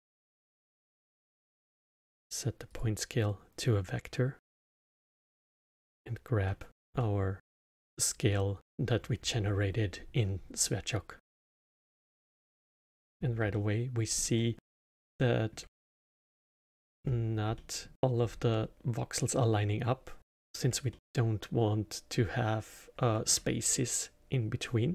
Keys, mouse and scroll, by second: 0.3-3.3 drag, 5.0-6.8 drag, 6.8 scroll down 2, 6.9-8.2 alt+middle drag, 8.2 scroll up 1, 11.9-13.1 alt+middle drag, 13.1-13.5 scroll up 1, 13.5-17.0 alt+middle drag, 17.0-17.5 scroll up 2, 17.5-18.2 alt+middle drag, 18.2-18.8 scroll up 2, 20.2-24.9 alt+middle drag.